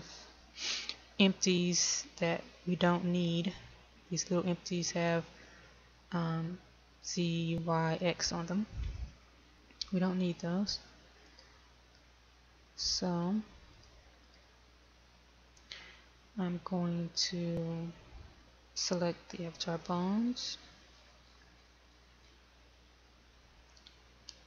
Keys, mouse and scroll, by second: 12.0 click, 20.4-22.4 scroll down 1, 22.4-23.3 scroll down 1.